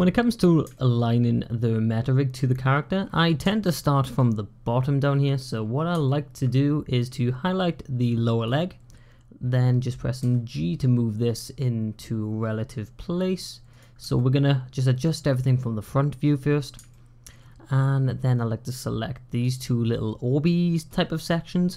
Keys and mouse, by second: 0.6 shift+click, 3.5 shift+middle click, 5.9 shift+middle click, 7.0-8.3 drag, 10.0 g, 14.0 shift+click, 16.8 shift+click, 18.3-19.3 drag.